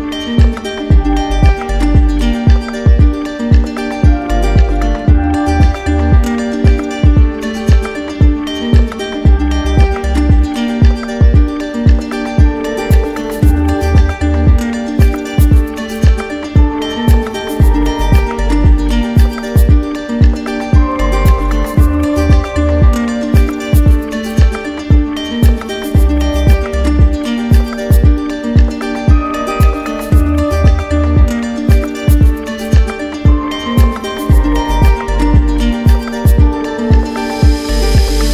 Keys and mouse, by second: 1.0 click, 2.5 click, 5.4 click, 6.4 click, 12.3 click, 13.4 click, 16.0 click, 16.8 alt+click, 18.8 click, 19.8 click, 26.7-27.7 drag, 29.8-30.9 drag, 32.9 z.